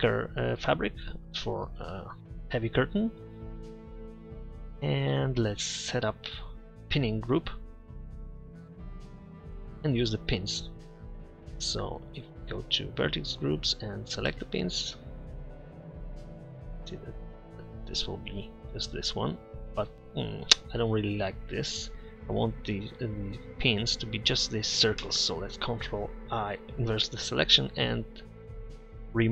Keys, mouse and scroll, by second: 1.9 middle drag, 4.2-4.6 middle drag, 14.3 Tab, 15.5 Tab, 19.5-21.0 middle drag, 26.4 ctrl+i.